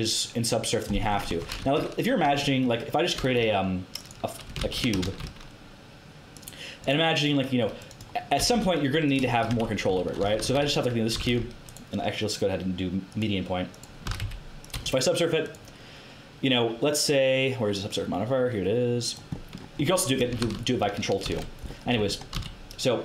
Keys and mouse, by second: 1.0 middle click, 1.3 Tab, 1.6 KP_1, 3.1 shift+a, 4.6 ctrl+z, 5.0 shift+a, 8.3 g, 9.4 Tab, 9.8 a, 10.2 a, 10.5 x, 11.1 s, 14.0 s, 14.7 Tab, 19.3 middle click, 20.4 ctrl+z, 21.2 ctrl+2, 21.9 Tab, 22.3 a.